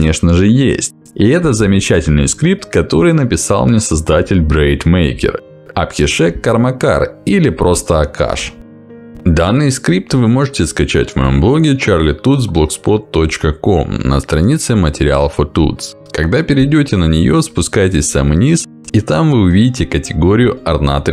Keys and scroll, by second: 4.9 Escape.